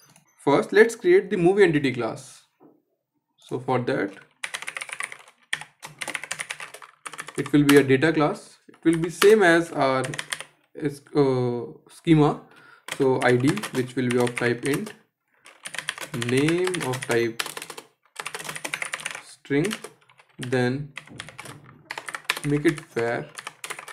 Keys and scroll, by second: 21.5 Escape.